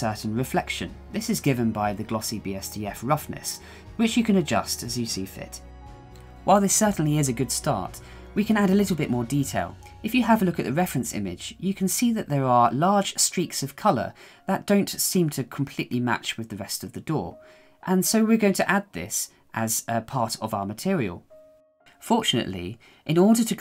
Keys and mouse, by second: 2.3-3.5 shift+middle drag, 5.1-7.9 middle drag, 9.2 middle click, 10.2 KP_1, 11.1-11.7 shift+middle drag, 12.0-12.3 shift+middle drag, 17.9-20.9 shift+middle drag, 21.5-22.6 shift+middle drag.